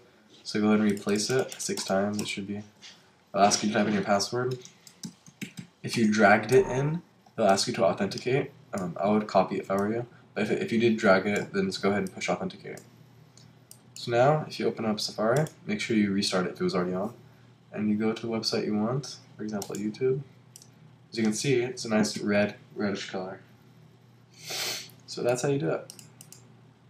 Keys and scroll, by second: 5.9 Return.